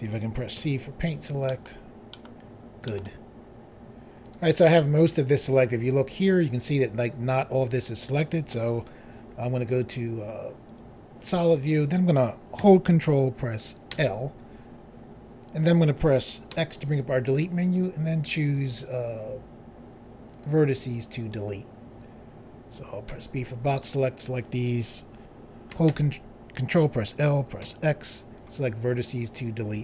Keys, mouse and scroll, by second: 0.5 c, 1.4 middle click, 2.1 middle click, 2.2 middle click, 2.8 middle click, 3.0 middle click, 4.2 right click, 10.6 click, 13.9 ctrl+i, 16.6 x, 20.3 click, 23.1 b, 23.5 click, 25.9 ctrl+i, 27.6 x, 28.4 click.